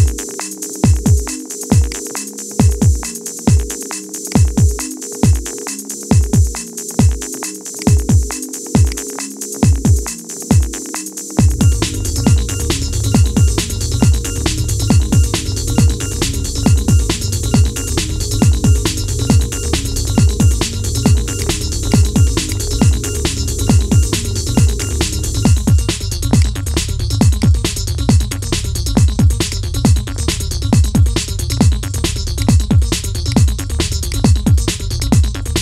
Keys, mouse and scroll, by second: 0.2-1.7 middle drag, 1.7 click, 2.7-4.0 shift+middle drag, 4.0 click, 8.1 scroll up 2, 8.7 click, 10.1 scroll down 2, 11.0 scroll up 1, 11.3 Tab, 12.6 /, 13.1 scroll up 2, 14.0 KP_1, 14.4 scroll down 2, 15.0 Tab, 15.6-18.3 shift+middle drag, 18.3-18.7 scroll down 3, 18.7-21.1 middle drag, 21.1 drag, 22.2 shift+click, 24.5 shift+click, 27.1 shift+click, 29.2 shift+click, 32.1 shift+click.